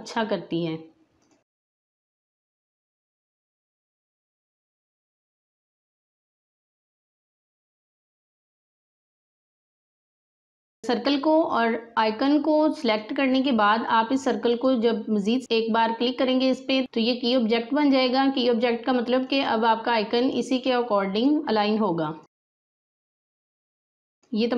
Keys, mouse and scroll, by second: 0.1-1.1 scroll down 1, 1.1 click, 1.9 space, 2.0 click, 2.4 space, 2.7-11.5 drag, 12.9-16.3 drag, 16.8 click, 19.1 click, 21.4-22.2 scroll down 2, 22.2-24.5 drag, 22.8-24.5 drag.